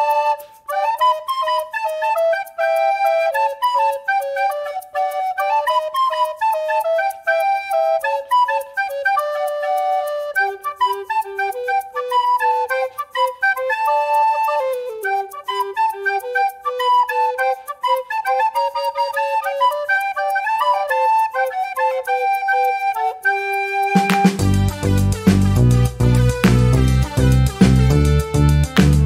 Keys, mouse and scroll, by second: 0.8 ctrl+click, 2.7 click, 3.4 click, 4.2 ctrl+click, 5.4 ctrl+click, 6.3 ctrl+click, 7.7 ctrl+shift+click, 8.1 ctrl+shift+click, 9.0 ctrl+click, 11.1 ctrl+d, 13.2 ctrl+shift+g, 14.5 ctrl+shift++, 16.0 shift+scroll up 2, 16.3 shift+right click, 17.4 click, 18.6 click, 19.3-21.1 drag, 21.8 click, 22.8 click, 23.3 shift+click, 24.0 ctrl+shift+z, 25.0 ctrl+g, 26.2 click, 27.4-27.7 ctrl+scroll down 1, 28.4 ctrl+5, 28.8-29.0 ctrl+scroll up 1.